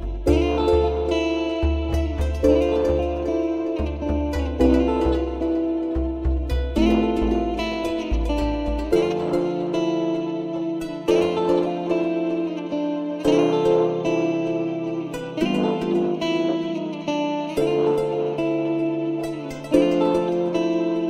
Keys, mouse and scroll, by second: 0.0 click, 0.3 scroll up 1, 0.4-0.8 middle drag, 0.8-2.2 scroll down 1, 2.2 shift+a, 5.7-8.7 shift+middle drag, 8.7 s, 12.8-14.3 drag, 14.5-16.6 drag, 20.3 Tab.